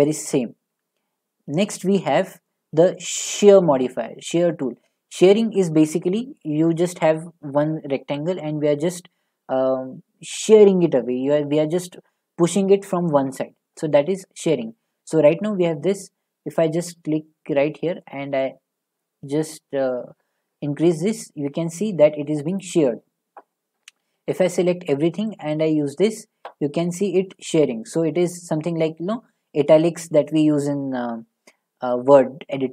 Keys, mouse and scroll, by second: 1.2 middle click, 3.4 click, 22.6 click, 24.0 a, 24.1 click.